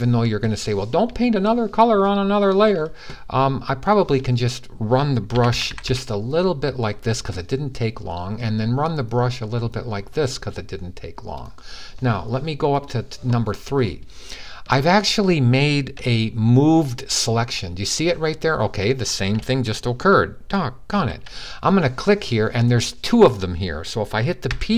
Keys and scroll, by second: 5.1-5.7 typing, 20.7 super+d, 24.2 p.